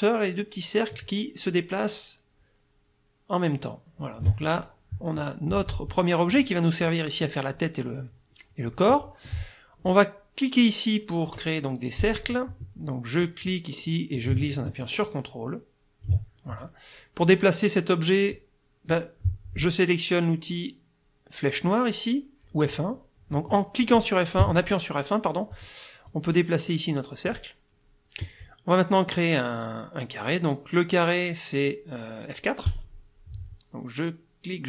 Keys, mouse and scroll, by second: 1.1-4.4 ctrl+drag, 6.3 click, 8.9 click, 12.0 click, 13.5-16.3 drag, 18.3 click, 24.4 F1, 25.5 click, 26.1-27.5 drag, 32.7 click.